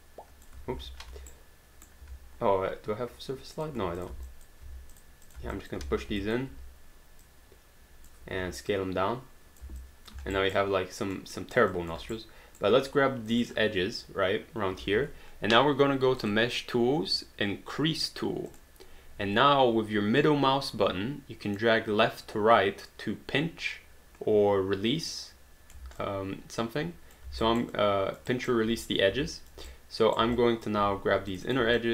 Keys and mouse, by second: 0.7 ctrl+z, 1.0 q, 1.3 right click, 2.0 q, 3.6 click, 4.0 shift+click, 4.3 alt+click, 4.9 shift+click, 5.6 alt+click, 6.3 alt+click, 7.3 click, 8.7 click, 9.9 alt+click, 10.2 alt+d, 10.3 alt+right click, 10.6 alt+click, 11.3 alt+right click, 11.7 alt+click, 12.1 right click, 13.3 click, 16.2 click, 18.5 click, 21.6 middle click, 26.0 alt+click, 27.3 alt+d, 27.5 alt+right click, 27.7 alt+click, 28.3 alt+right click, 29.3 alt+click, 29.7 right click, 30.4 alt+click, 31.3 click, 31.8 alt+click.